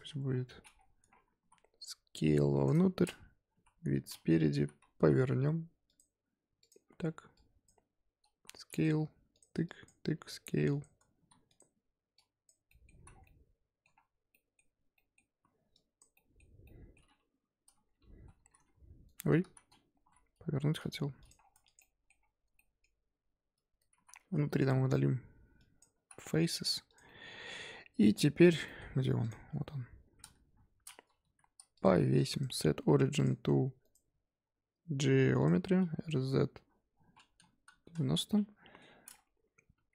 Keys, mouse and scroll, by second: 0.2-1.0 scroll down 11, 1.0 Tab, 1.1 scroll up 2, 1.4 s, 2.7-3.5 scroll up 3, 3.5 KP_1, 4.5 z, 4.9 r, 6.6 click, 6.8-7.3 scroll up 1, 7.3 click, 8.3 s, 8.9 g, 9.6 click, 10.1 s, 11.1 s, 12.1 click, 12.7 middle click, 12.9 z, 13.1 scroll down 4, 13.2-14.6 middle drag, 14.6-14.9 scroll up 2, 14.9 middle click, 15.3 z, 15.7 click, 16.1 z, 16.6-18.1 middle drag, 18.1 a, 18.5 e, 19.4 ctrl+z, 19.9 r, 21.3 scroll down 3, 21.5 Tab, 21.6 click, 21.8 middle click, 22.1 scroll up 2, 22.4 Tab, 22.5 middle click, 22.8-23.5 scroll up 1, 23.5 Tab, 23.8 Tab, 23.9 z, 24.2 3, 24.5 click, 24.8 x, 25.9 z, 26.2 scroll down 1, 26.3 Tab, 26.4-26.8 middle drag, 26.8 click, 27.0-27.9 scroll down 2, 27.0-27.4 middle drag, 27.9-28.6 scroll down 6, 28.6 middle drag, 28.8-30.4 scroll up 7, 29.2 click, 30.4 KP_7, 31.2 g, 32.1 scroll up 1, 32.3-35.8 right drag, 35.8 r, 38.3-39.4 middle drag, 39.4-39.7 scroll up 1, 39.7 Tab.